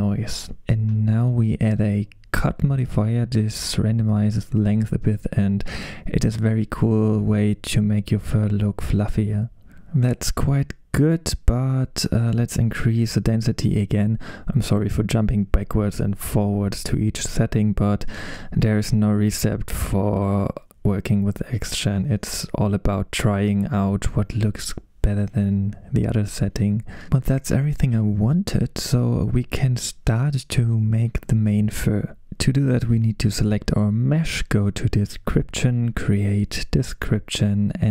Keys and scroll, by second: 13.4 typing, 13.5 Return.